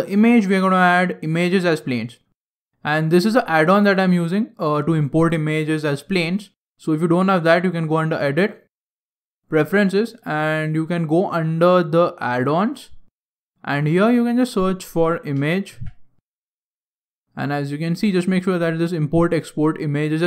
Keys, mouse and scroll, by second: 7.8 click.